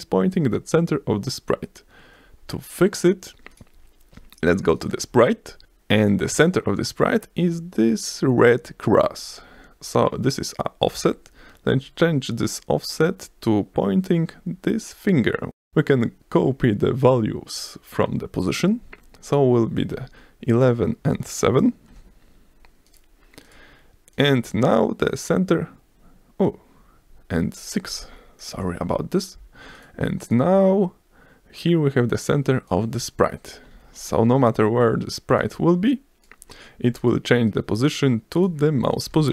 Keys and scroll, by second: 19.7 1, 21.9 7, 28.5 BackSpace, 28.7 6, 28.9 Return, 33.7 ctrl+s, 39.1 F5.